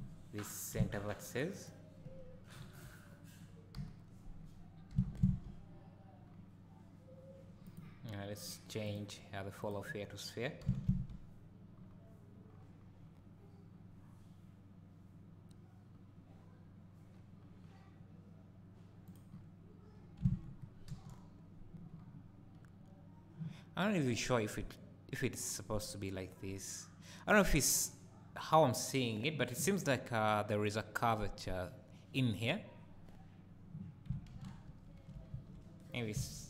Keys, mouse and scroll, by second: 0.7 c, 1.6 right click, 2.6 KP_1, 3.7 KP_3, 4.9 g, 7.7 right click, 8.8-19.1 drag, 10.6 g, 19.3-20.2 scroll down 2, 20.2 Tab, 20.9 KP_0, 21.9-26.1 scroll up 2, 34.4 ctrl+z, 35.4 Tab, 35.9-36.2 scroll down 1, 36.2 alt+a.